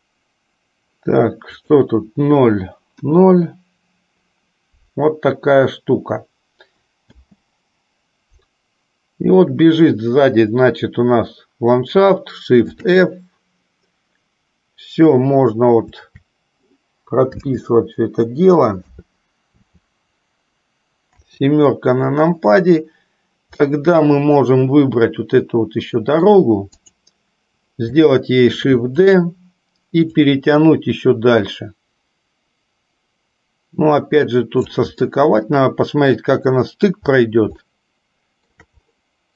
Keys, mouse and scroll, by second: 0.0 click, 1.6 click, 3.3 KP_0, 7.4 space, 12.9 shift+f, 21.4 KP_7, 23.8-26.4 middle drag, 27.1 click, 28.7 shift+d, 30.6-35.0 drag, 35.2-37.2 middle drag, 37.8-38.8 shift+middle drag.